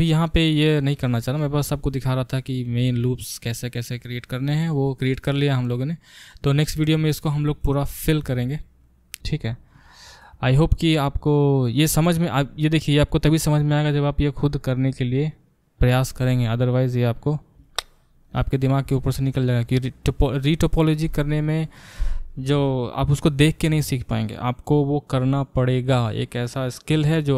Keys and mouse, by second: 17.6 Tab, 18.2 click, 18.3-27.3 middle drag.